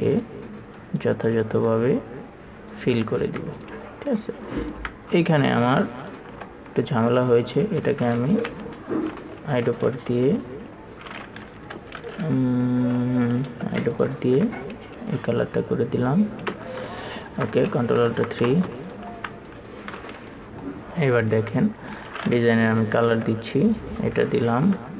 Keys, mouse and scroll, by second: 0.0 click, 4.9 ctrl+click, 5.7 click, 6.7 KP_3, 7.7 click, 8.8-9.7 typing, 13.8 7, 14.3 click, 15.4 ctrl+click, 16.8 ctrl+space, 17.4 alt+super+m, 18.4 KP_3, 18.8 space, 19.8 click, 22.9 typing, 23.9 click.